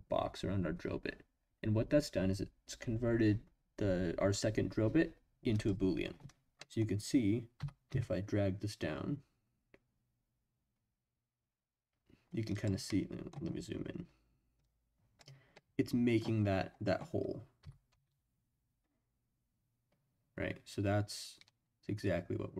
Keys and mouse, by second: 6.6 middle click, 7.6 g, 7.9 z, 12.5 click, 12.8-13.3 middle drag, 14.7 click, 15.5-16.2 drag, 17.6 g, 17.9 z.